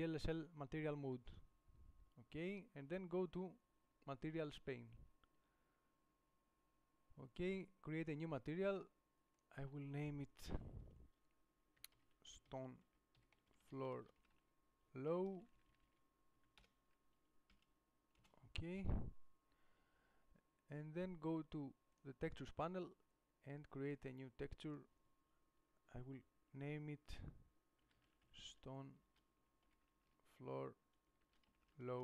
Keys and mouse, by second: 18.5 Left.